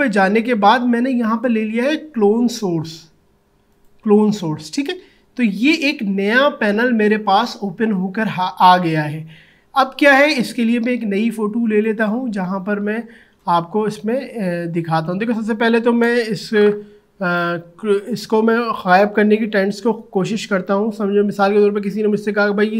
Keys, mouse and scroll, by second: 3.7 click, 11.8 click, 17.3-20.6 drag.